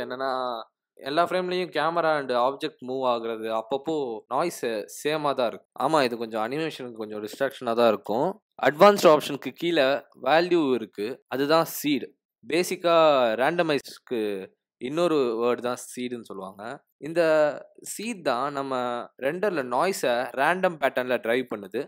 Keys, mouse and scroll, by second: 8.2 click, 10.4 click, 10.7 click, 10.9 click, 11.7 click, 12.0 click, 12.2 click.